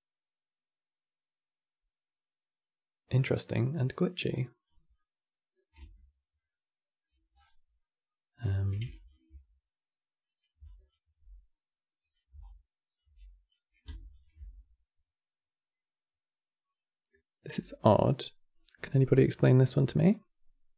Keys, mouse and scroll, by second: 4.0-4.7 drag, 4.7-7.1 middle drag, 7.1-7.5 scroll down 8, 7.5-8.6 middle drag, 8.6 ctrl+right click, 10.4-12.1 alt+right drag, 12.1 alt+click, 13.8 ctrl+shift+click, 15.4-18.4 middle drag.